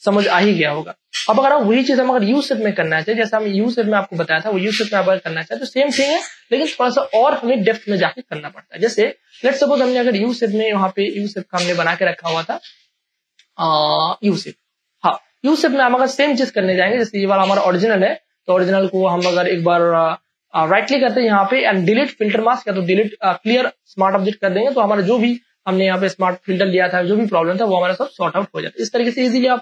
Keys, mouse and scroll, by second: 0.4 h, 2.2 ctrl+d, 2.5 space, 3.0 ctrl+click, 5.2 ctrl+e, 8.3 click, 9.0-10.2 scroll up 1, 10.2 click, 11.2-12.1 scroll up 1, 12.1 click, 15.1 space, 15.4 ctrl+click, 16.4 ctrl+click, 16.7 v, 17.4 click, 18.1-18.4 scroll down 1, 18.6 right click, 18.6 right click, 20.1 click, 20.6 right click, 20.6 click, 20.7 right click, 23.2 click.